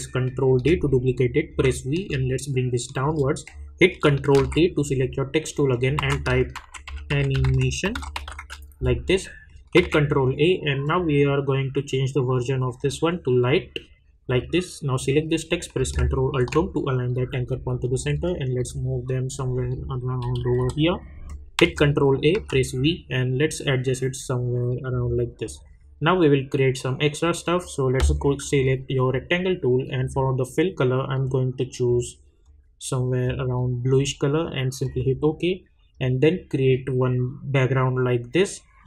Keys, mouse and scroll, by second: 0.4 ctrl+d, 1.5 v, 2.3-3.3 shift+drag, 4.3 ctrl+t, 5.7 click, 5.9 ctrl+a, 6.3-8.8 typing, 9.7 ctrl+a, 10.8 click, 16.2 ctrl+alt+Home, 17.3 Up, 20.2 Down, 20.9 click, 21.6 ctrl+a, 22.3 v, 22.7-25.4 drag, 28.4-38.8 drag.